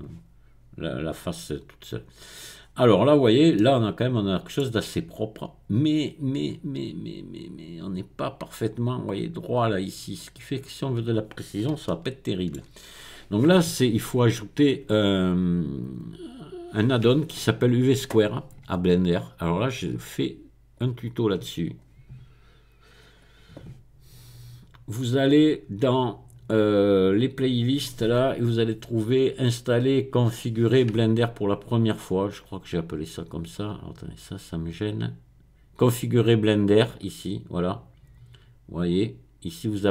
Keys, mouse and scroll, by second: 2.6-3.5 scroll up 1, 3.5-7.9 middle drag, 10.3-11.4 scroll down 2, 11.9-13.1 shift+middle drag, 19.5 click, 20.7 click, 21.7 click, 23.0 click, 27.4 click, 29.0-31.9 scroll down 3, 31.9-32.6 scroll down 1, 33.5-35.3 drag, 35.4 click, 35.9 middle click.